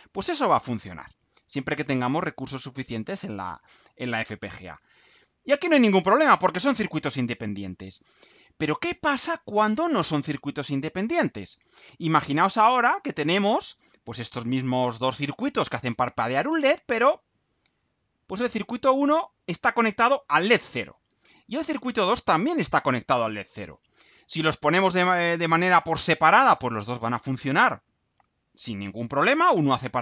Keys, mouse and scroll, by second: 8.7-9.5 scroll down 2, 10.5-11.0 scroll down 2.